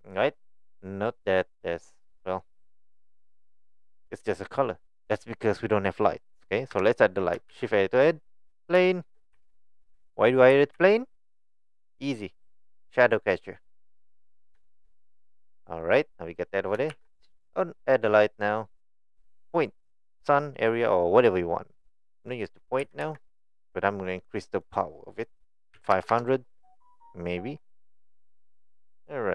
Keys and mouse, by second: 0.0 click, 1.3 click, 1.7 middle click, 2.0 click, 6.7 KP_1, 7.5 shift+a, 8.9 shift+middle click, 9.4 s, 13.4 click, 13.9-14.4 middle drag, 14.7 shift+middle click, 14.9 middle drag, 15.6 middle click, 16.9 shift+a, 22.8 g, 24.5-27.4 drag, 26.1 KP_0.